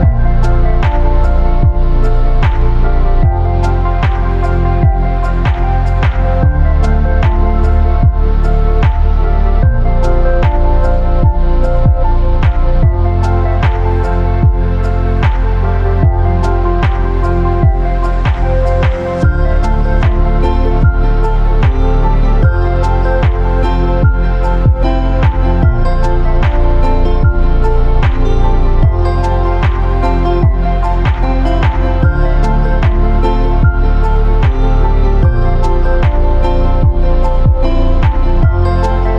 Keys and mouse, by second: 1.0 middle click, 1.6-2.6 drag, 2.7 click, 4.2 click, 5.6 click, 6.9 click, 8.6-9.7 drag, 11.6 click, 20.3-20.7 drag, 21.3 click, 23.7 KP_7, 26.6 space, 28.1 click, 32.7 space, 36.8-39.1 drag.